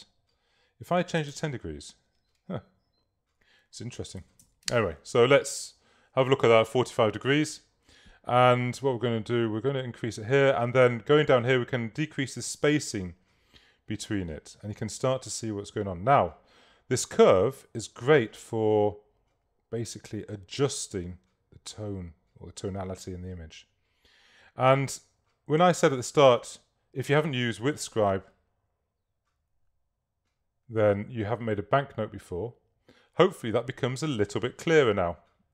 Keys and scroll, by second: 0.9-1.7 typing, 4.0-4.9 typing.